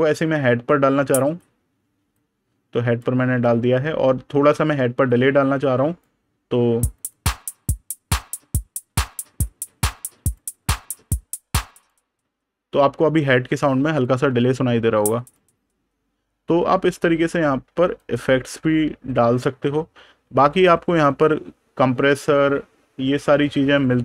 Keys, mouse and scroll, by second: 2.0 click, 3.1 super+KP_Add, 4.2 super+KP_Subtract, 4.9 click, 8.8 click, 10.4 super+KP_Subtract, 11.6 click, 15.0 click, 20.1 super+KP_Add, 20.8 super+KP_Subtract, 22.3 super+KP_Add.